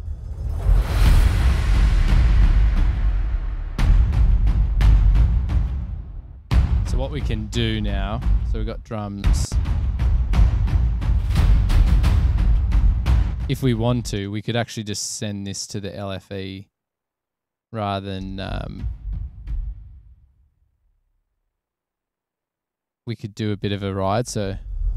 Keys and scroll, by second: 4.6 super+=, 8.1-11.1 typing, 10.1 Return, 14.2 space, 18.2 space.